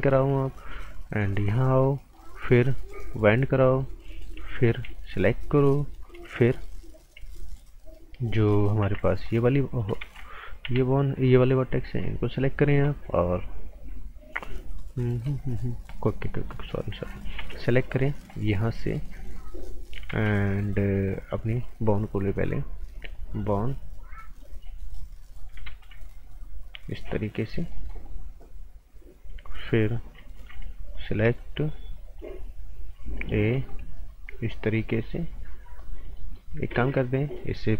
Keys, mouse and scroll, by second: 1.3 click, 3.5 right click, 4.3 typing, 5.1 click, 8.8 t, 9.2 click, 10.0 ctrl+z, 10.4-11.1 typing, 11.3 click, 15.9 right click, 16.3 scroll up 1, 16.5 right click, 17.4 a, 17.7 right click, 18.1 scroll up 1, 18.3 right click, 19.2 click, 20.1 ctrl+z, 21.5 click, 23.6-24.0 scroll up 1, 24.0 scroll down 1, 24.1 right click, 24.9 click, 25.7 z, 26.7 click, 27.9 right click, 30.3 b, 30.9 click, 33.5 a, 34.2 click, 35.9 scroll down 1, 36.1 right click, 36.7 typing.